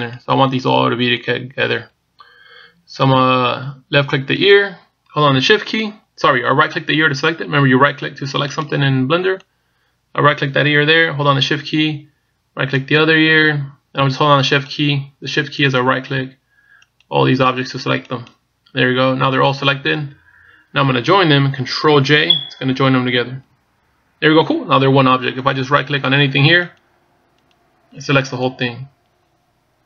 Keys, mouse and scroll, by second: 0.1 right click, 0.8 right click, 1.5 right click, 2.0 right click, 5.2 right click, 8.8 right click, 9.4 right click, 10.1 right click, 13.5 shift+right click, 15.5 shift+right click, 16.4 shift+right click, 17.8 shift+right click, 18.8 shift+right click, 24.5 ctrl+j, 26.3 right click, 26.9 right click, 27.5 right click, 28.3 right click.